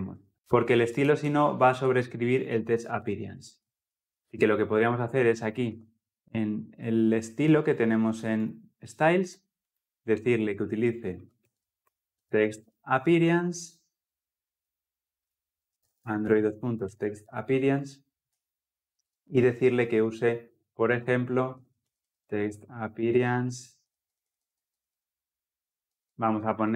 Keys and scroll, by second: 12.0 Return, 18.2 Return.